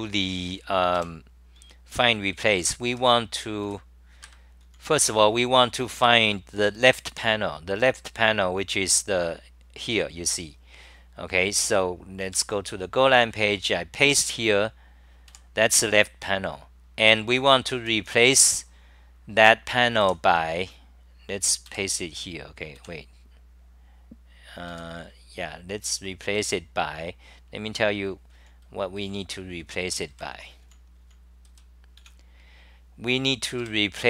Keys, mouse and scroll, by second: 1.0 ctrl+shift+Tab, 1.9-3.6 typing, 4.2 ctrl+g, 4.6-7.6 typing, 14.1 ctrl+shift+Tab, 14.1 w, 31.3-32.0 typing.